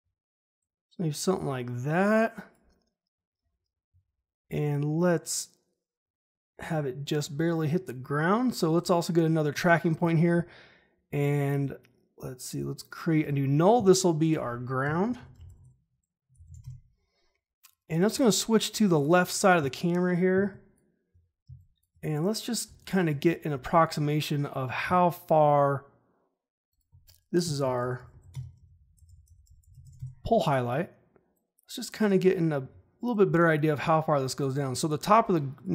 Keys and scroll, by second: 14.8 Return, 14.9-16.9 typing, 20.3 space, 27.4 Return, 27.5-30.3 typing, 32.6 ctrl+z.